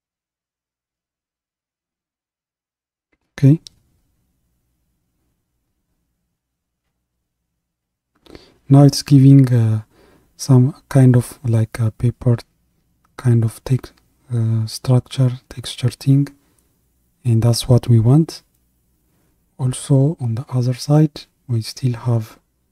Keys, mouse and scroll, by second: 12.5-16.7 middle drag, 16.7-22.7 drag.